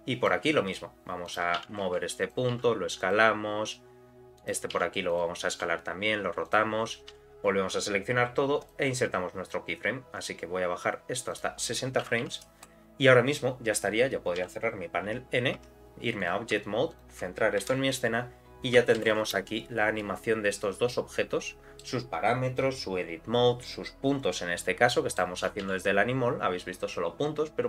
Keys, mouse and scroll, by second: 0.7 scroll down 1, 1.3 click, 1.6 g, 2.6 s, 4.4 click, 4.7 s, 5.5 r, 7.1 a, 8.6 click, 11.3-13.4 drag, 15.2 n, 15.6 Tab, 16.2 click, 16.9 shift+click, 17.6 KP_Decimal, 19.0 shift+Left, 19.2 space, 20.0-21.8 middle drag, 24.9 middle click, 25.6 n.